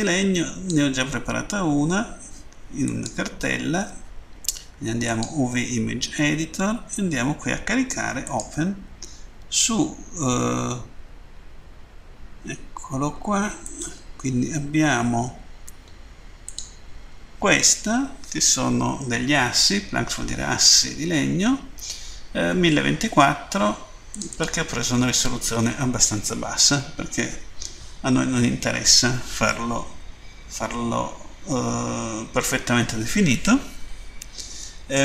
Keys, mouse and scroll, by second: 2.7 click, 4.9 click, 8.0 click, 11.1-13.2 scroll down 3, 13.7 click, 16.4 click, 24.1 click, 24.2 click, 26.4 scroll down 2, 30.6-31.6 scroll down 1.